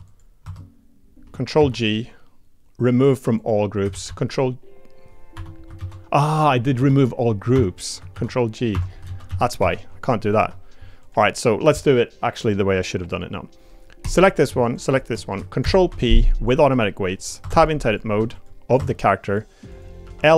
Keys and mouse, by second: 0.0 click, 0.4 Tab, 1.6 ctrl+g, 3.9 ctrl+g, 5.8 ctrl+z, 6.7 ctrl+f, 8.1 ctrl+g, 9.0 ctrl+z, 9.3 ctrl+z, 10.4 Tab, 11.0 click, 13.0 click, 14.7 shift+click, 15.6 ctrl+p, 17.4 Tab, 17.8 click, 18.2 Tab, 18.3 click, 18.8 Tab, 20.0 l.